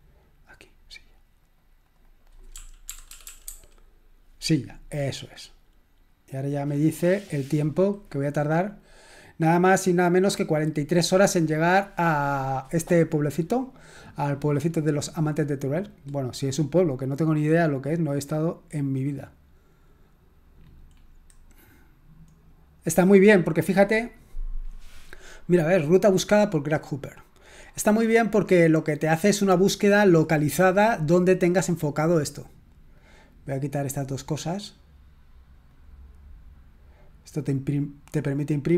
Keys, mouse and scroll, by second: 1.9 right click, 2.4-4.0 typing, 5.3 click, 16.9 click, 18.0-18.4 scroll up 1, 19.7-20.5 scroll up 1, 20.5-21.3 scroll up 1, 21.3-24.2 scroll up 1, 24.2-27.8 scroll up 1, 27.8 click, 28.3-29.5 scroll up 1, 29.5-30.4 drag, 30.4-31.8 scroll up 1, 31.8-33.0 scroll up 1, 33.0 click, 34.0 click, 35.7 click, 38.4 click.